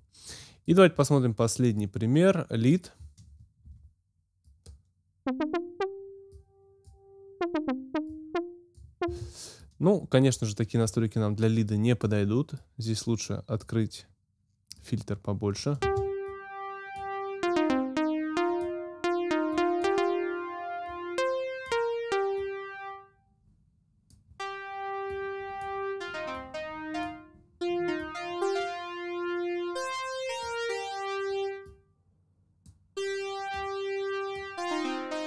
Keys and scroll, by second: 3.6 space, 9.1 space, 15.8 space.